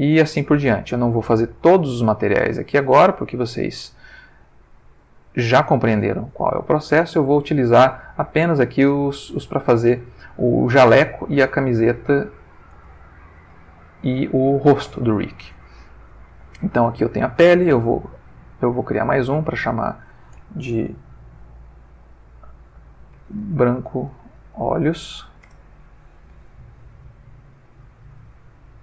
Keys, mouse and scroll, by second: 1.8 click, 2.5 click, 3.3 click, 4.0 click, 4.5 click, 5.7 click, 7.1 click, 11.9 shift+middle click, 13.0-14.2 ctrl+shift+middle drag, 14.2 ctrl+shift+middle click, 18.4 click, 19.2 click, 19.8 click, 23.0-25.2 typing, 25.5 shift+Return, 27.5 click, 28.1 click, 28.6 click.